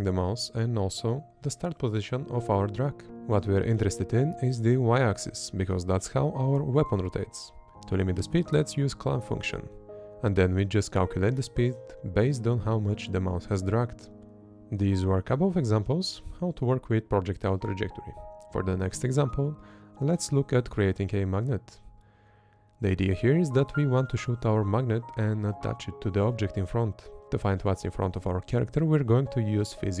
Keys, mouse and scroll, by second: 4.7 Up, 5.3 Up, 6.2 click, 7.1 Up, 7.4 Up, 7.8-9.8 drag, 9.9 Up, 10.2 Up, 11.5 click, 14.4 Up, 14.7 Up, 15.4 click, 19.1 Up, 19.6 Up, 19.9 Up, 24.7 space, 25.8 Up, 26.6-30.0 typing, 27.2 Up, 27.8 Up.